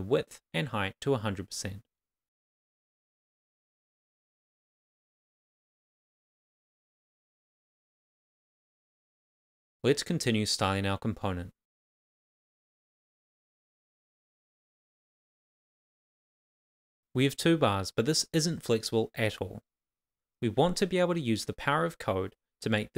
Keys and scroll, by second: 2.2 super+c, 2.7 Return, 2.8 super+v, 4.0 super+s, 5.0 Return, 7.6 shift+;, 8.2 Right, 8.6 Return, 9.4 shift+|, 9.9 shift+;, 11.2 Right, 11.6 Return, 12.3 shift+c, 13.0 shift+;, 14.2 super+s, 21.2 super+s.